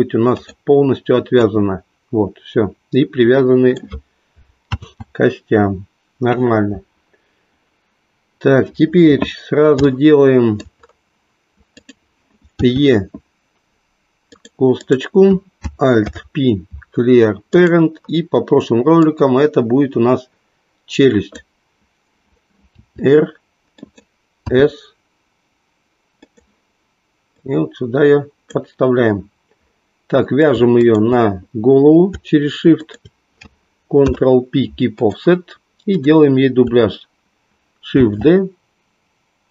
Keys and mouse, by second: 1.4-3.8 drag, 4.8 ctrl+z, 9.8-10.8 shift+middle drag, 11.8 click, 13.8 e, 14.9 click, 16.0 alt+p, 20.9 click, 22.8 r, 23.9 click, 24.4 s, 27.5-28.7 drag, 33.9 ctrl+p, 38.0 shift+d.